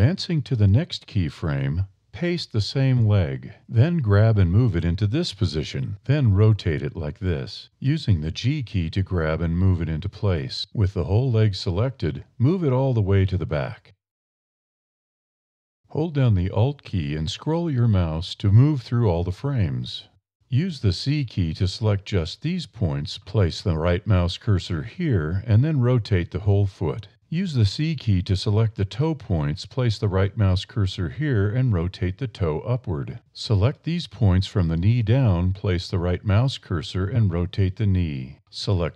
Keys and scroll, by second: 3.1 super+v, 3.9 super+c, 4.1 g, 6.7 r, 9.4 g, 14.1 a, 20.5 c, 25.3 r, 27.3 a, 27.9 c, 30.1 r, 32.2 a, 32.6 c, 35.8 r, 37.2 1, 38.3 r.